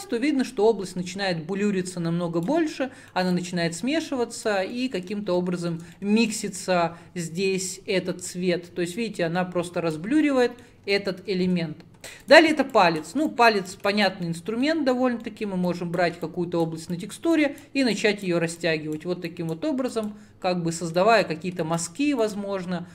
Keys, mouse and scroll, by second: 2.8-3.4 middle drag, 3.4-4.8 drag, 4.8-6.4 middle drag, 6.4-9.5 drag, 10.3-12.4 middle drag, 12.4-14.4 drag, 14.4-15.0 middle drag, 15.0 scroll down 2, 15.3 middle click, 15.7-22.9 drag.